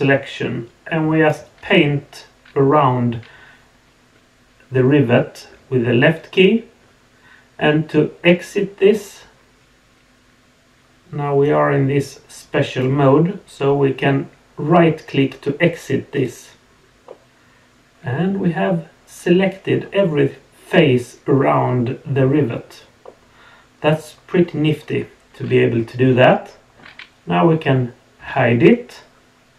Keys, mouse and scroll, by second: 17.0 middle click, 17.9 click, 18.2-19.7 middle drag, 23.0 middle click, 23.8-26.8 middle drag, 28.2 h.